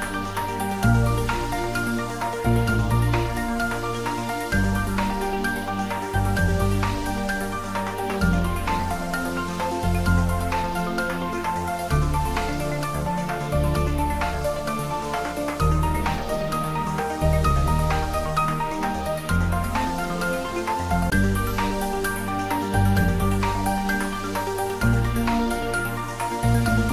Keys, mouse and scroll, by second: 0.9 s, 2.0 click, 2.7 ctrl+z, 3.6 r, 4.4 click, 4.8 ctrl+z, 5.3-6.0 scroll up 1, 6.0-9.4 middle drag, 11.6 Tab, 12.1-12.6 scroll down 1, 12.6-13.9 middle drag, 13.9-14.3 scroll down 1, 14.3-15.9 middle drag, 15.9-17.0 scroll up 1, 17.0 middle click, 17.6 Tab, 19.0-22.3 drag, 22.3 typing, 22.7 click, 23.7 scroll up 1, 23.9 middle click, 24.8-26.9 drag.